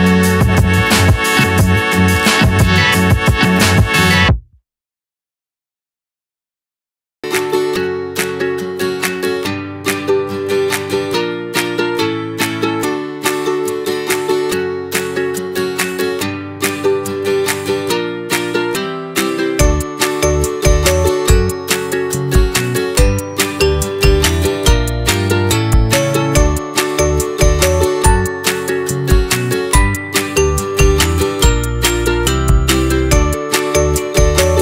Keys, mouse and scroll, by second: 0.6 click, 1.5-3.3 scroll down 3, 3.3 s, 6.5 g, 10.0-11.4 middle drag, 11.4 scroll up 1, 11.5 middle click, 12.1 g, 13.4-13.7 scroll up 2, 13.7-16.2 middle drag, 16.2 ctrl+r, 19.1 middle click, 20.0 ctrl+r, 22.7 middle click, 23.2-23.8 scroll up 2, 23.8 click, 24.2 scroll up 1, 24.5-25.7 middle drag, 25.7 click, 26.2 shift+click, 26.6 shift+click, 27.0 shift+click, 27.4 shift+click, 27.7 shift+click, 28.1 shift+click, 28.5 shift+click, 29.1 shift+click, 29.6 shift+click, 30.0 shift+click, 30.4 shift+click, 31.0 middle click, 31.6-32.6 scroll down 4, 32.6 shift+d, 33.9 p.